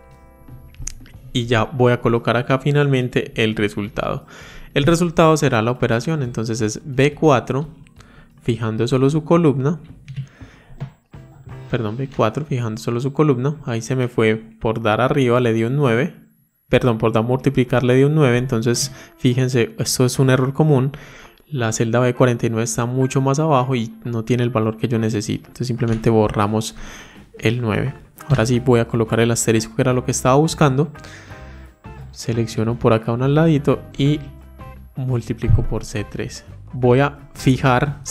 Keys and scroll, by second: 8.4 F4, 35.4 F4.